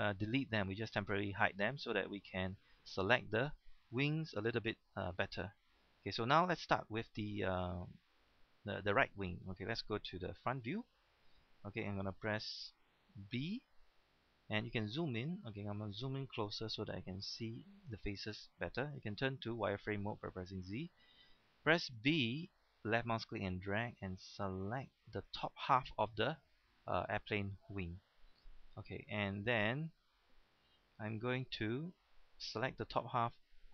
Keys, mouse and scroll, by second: 0.9-1.6 scroll up 1, 1.7-2.1 scroll down 1, 2.1-4.9 middle drag, 4.9-5.6 scroll down 1, 5.7-10.2 scroll up 1, 10.4 KP_1, 13.6 b, 14.6-15.1 scroll up 1, 15.1 right click, 15.5 scroll up 1, 17.0 shift+middle click, 17.1 scroll up 1, 17.5 shift+middle click, 19.1 z, 22.0 b, 22.8-25.9 drag, 29.8-30.9 scroll down 1, 31.1 shift+middle click, 32.2 shift+middle click, 33.6 scroll down 1.